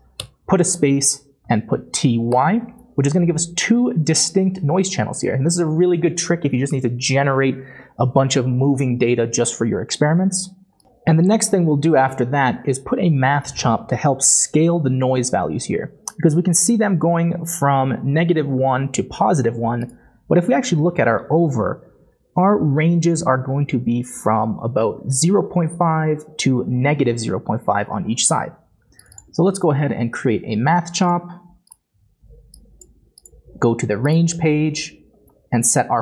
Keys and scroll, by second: 1.4 typing, 2.3 Return, 29.5-29.9 typing.